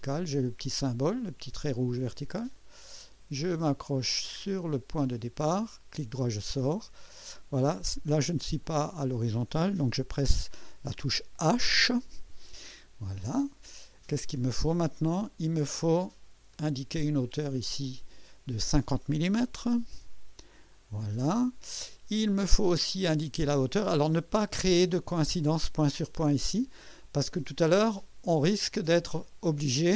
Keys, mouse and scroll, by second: 2.4 click, 5.0 click, 6.0 right click, 7.0 right click, 8.6 click, 12.2 h, 14.4 right click, 15.1 right click, 16.5 click, 17.8 click, 19.3 KP_5, 19.8 KP_0, 19.9 KP_Enter, 21.9-23.0 right drag, 23.6 typing, 27.3 right click, 27.8 middle click.